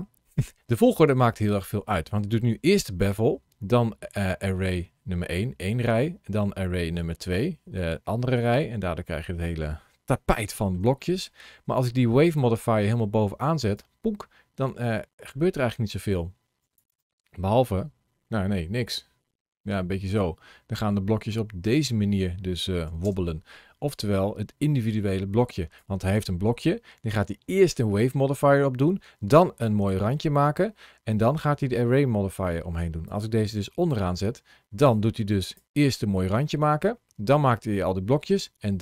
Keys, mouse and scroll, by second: 8.3 middle click, 9.4 scroll up 1, 10.8 middle click, 12.2 click, 14.4 middle click, 16.0 click, 16.8 space, 22.9 space, 24.0 click, 32.9 click, 34.8 click, 38.1 space.